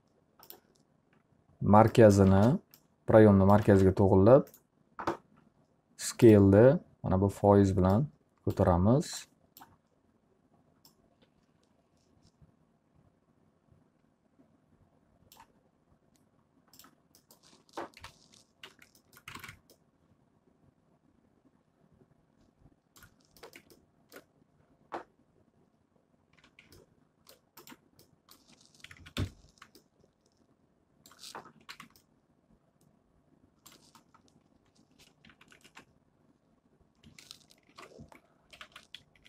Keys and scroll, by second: 1.8 space, 17.6 p, 18.7 z, 19.4 alt+a, 26.0 d, 28.8 F3, 29.2 F4, 31.6 ctrl+z, 37.7 ctrl+y, 38.3-39.1 typing.